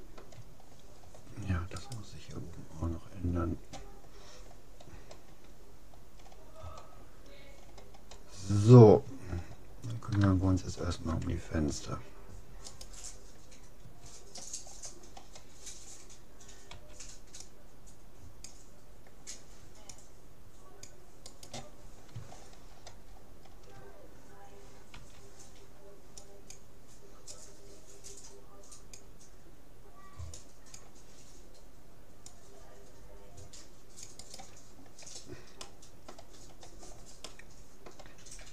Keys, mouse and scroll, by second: 0.6-1.2 scroll up 1, 1.2-3.0 middle drag, 1.8-3.6 right drag, 6.2-7.2 middle drag, 8.5-12.8 middle drag, 12.8-14.2 right drag, 14.4 click, 14.8-17.0 middle drag, 16.8 c, 21.8-25.4 middle drag, 24.9 c, 35.0 middle click, 35.6-38.5 middle drag.